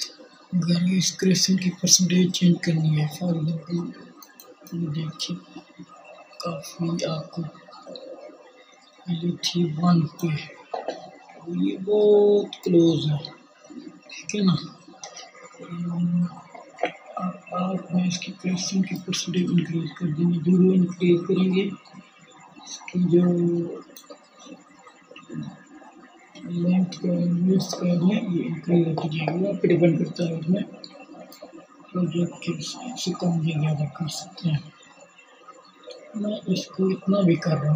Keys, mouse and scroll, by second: 1.8-37.7 drag, 32.2-37.7 middle drag.